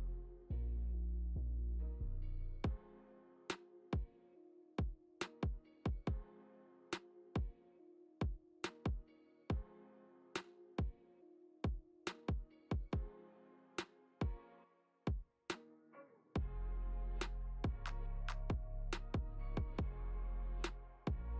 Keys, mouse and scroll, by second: 1.6 shift+d, 6.1 click, 6.6 click, 7.2 g, 10.7 g, 16.0 click, 16.3 shift+g, 16.5 shift+d, 16.8 shift+d, 17.2 click, 18.0 g, 20.9 shift+d, 21.1 click.